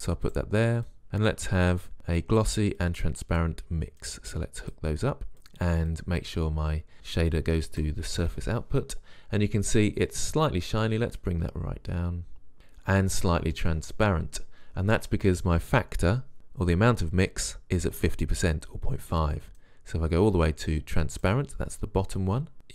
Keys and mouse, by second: 1.1-1.5 drag, 3.1 click.